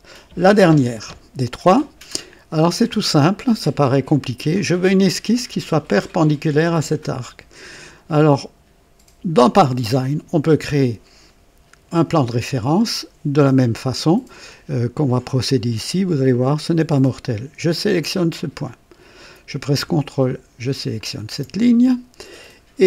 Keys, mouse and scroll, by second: 0.1-0.8 typing, 2.8 scroll up 2, 3.5-4.1 right drag, 18.4 click, 21.0 ctrl+click.